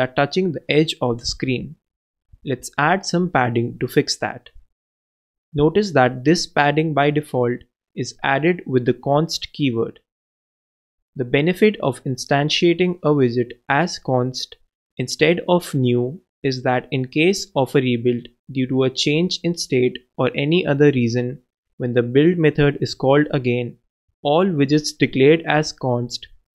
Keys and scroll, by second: 2.6 alt+Left, 2.7 alt+Return, 4.9 super+Down, 5.0 super+Right, 5.7 shift+Left, 6.3 shift+i, 6.9 super+2, 7.3 super+s.